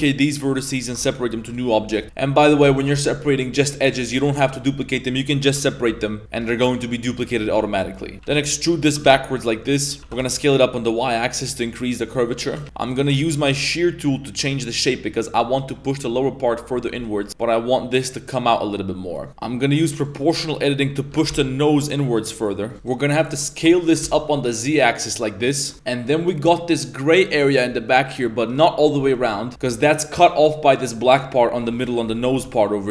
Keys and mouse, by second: 1.4-2.0 typing, 1.9 Tab, 2.7 alt+right click, 5.5 p, 5.9 Tab, 6.4 g, 7.4 Tab, 7.6-8.9 typing, 10.0 s, 12.5 g, 12.6 ctrl+z, 12.8 click, 13.2 middle click, 14.1-15.4 drag, 15.7 middle click, 17.0 middle click, 17.3 z, 17.7 click, 19.1 middle click, 19.3 ctrl+z, 19.8 click, 20.2 middle click, 20.6 middle click, 21.1 g, 22.7 alt+Tab, 22.7 right click, 23.0 right click, 23.4 right click, 23.8 s, 31.7 middle click, 32.0-32.9 typing, 32.8 middle click.